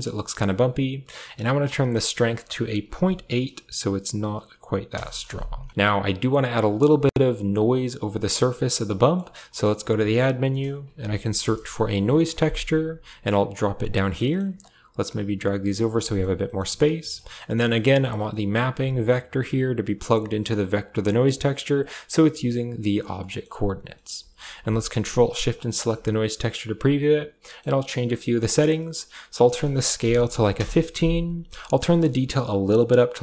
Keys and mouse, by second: 2.1-4.8 drag, 6.1 click, 6.6 click, 6.9 click, 9.3 middle click, 9.7 shift+a, 14.0 middle click, 14.4 click, 15.0 g, 15.8 a, 15.9 click, 16.3 click, 16.8 click, 17.2 click, 17.5 click, 19.2 click, 19.3-21.0 drag, 21.6 click, 23.0 middle click, 23.7 click, 25.3 ctrl+shift+click, 26.0 click, 28.2 click, 28.6 middle click, 29.2-30.4 drag, 31.5-33.2 drag.